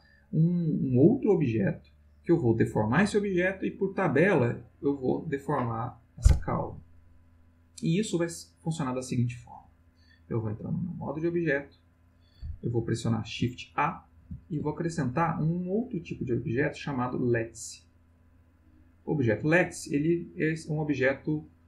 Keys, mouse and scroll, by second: 9.6 click, 10.8 click, 14.2 shift+a, 18.9 click, 19.8-21.3 middle drag.